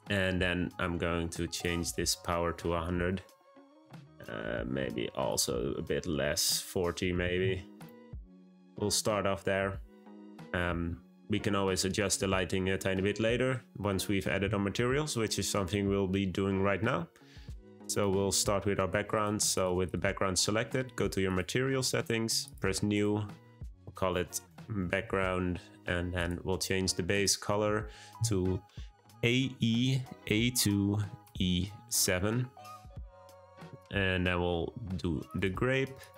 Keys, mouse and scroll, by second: 0.5-1.5 scroll up 1, 1.5-2.8 drag, 2.8 0, 4.0 click, 5.3-7.8 drag, 8.1-11.2 scroll down 1, 19.1 click, 19.5 click, 19.8 click, 21.2 click, 22.4-25.9 drag, 26.1 click.